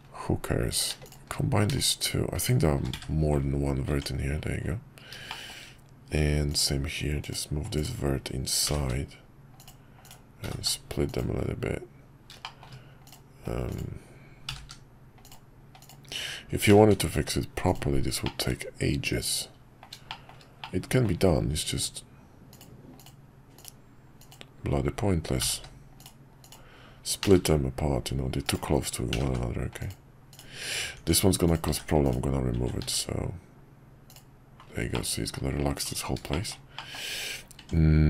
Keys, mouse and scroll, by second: 3.9 Tab, 5.3 shift+middle click, 10.0 click, 12.4 shift+middle click, 13.7 click, 15.8-18.3 drag, 18.3-19.9 middle drag, 20.3 shift+middle click, 20.7 middle click, 24.2 click, 25.5 g, 27.2 f, 29.1 g, 30.3 click, 31.0 Tab, 31.7 x, 32.8 x, 34.9 middle click, 35.3-35.8 scroll down 1, 36.3 shift+middle click, 36.7 shift+middle click, 37.0 scroll down 1, 37.6 Tab.